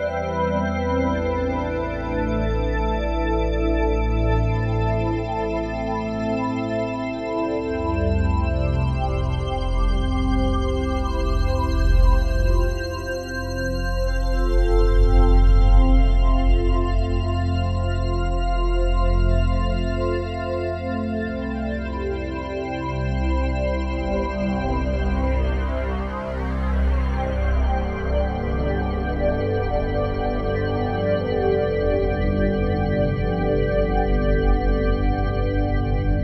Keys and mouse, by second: 0.2-3.3 ctrl+alt+drag, 3.7-6.7 alt+drag, 6.7 ctrl+z, 7.9 ctrl+z, 8.6 ctrl+z, 9.6 ctrl+z, 11.1 1, 11.8-14.9 ctrl+alt+drag, 15.5 g, 18.2 Escape, 19.0-24.3 ctrl+alt+drag, 25.8 g, 26.2 x, 29.3-32.2 shift+drag, 32.2 g, 32.5 x, 34.0-35.9 shift+drag, 35.9 s.